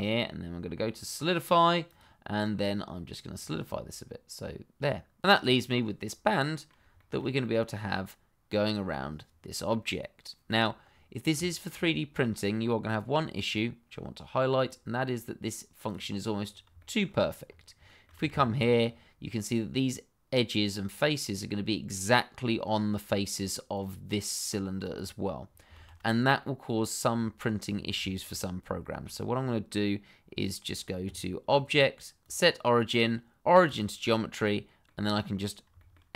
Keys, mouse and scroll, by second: 1.8 click, 5.7-6.0 scroll down 1, 6.0 middle click, 7.0 shift+middle click, 7.5 middle click, 11.5 shift+middle click, 13.4 click, 16.3-16.7 scroll up 1, 17.0-17.7 shift+scroll up 2, 17.8 shift+middle click, 18.3 shift+z, 18.8-20.9 scroll up 1, 23.7 click, 25.4 scroll down 1, 25.7 shift+z, 26.1 scroll down 1, 26.4 middle click, 27.1-27.4 scroll down 1, 28.0 shift+middle click, 28.3 scroll up 1, 28.8 shift+middle click, 29.3-31.4 scroll down 1, 31.5 click, 33.9 click, 34.4 middle click, 35.4 scroll up 1, 35.7 shift+middle click.